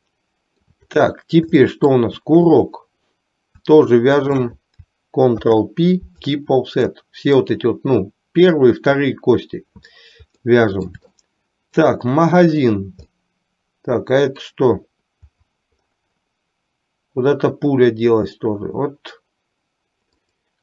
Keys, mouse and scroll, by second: 0.2 shift+middle click, 1.7 shift+middle click, 2.6 click, 4.2 shift+click, 5.5 ctrl+p, 7.1 middle click, 10.6 middle click, 11.5 shift+middle click, 13.1-14.6 middle drag.